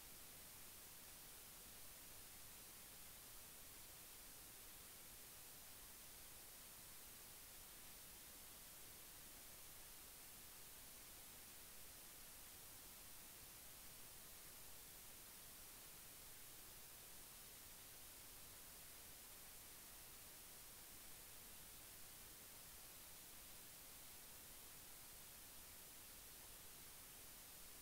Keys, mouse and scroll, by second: 0.0 click, 0.3 click, 0.7 click, 4.2 click, 5.5-8.3 drag, 8.7 click, 9.7 m, 13.1 click, 15.1 click, 15.2-16.6 middle drag, 16.0 click, 17.0-18.1 drag, 18.9 middle click, 19.3 click, 20.2 middle click, 22.1-24.0 middle drag, 24.4 space, 25.7 click, 26.1 space, 26.4 click, 26.7 click, 26.9 click.